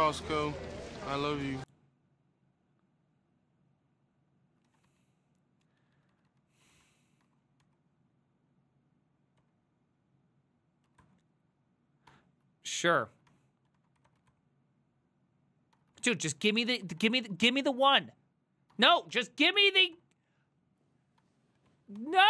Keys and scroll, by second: 4.7 ctrl+a, 4.9-7.8 typing, 9.4 typing, 10.6-11.5 typing, 12.1 Tab, 13.1 ctrl+c, 13.1-14.8 typing, 15.8 Tab, 15.9-20.5 typing, 21.2 Tab, 21.9 ctrl+c, 22.0-22.2 typing.